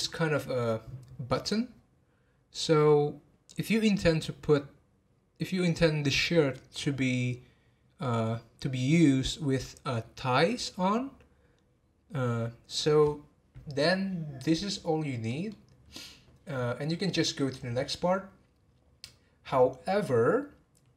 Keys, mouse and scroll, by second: 14.7 scroll down 4, 15.2-18.4 middle drag.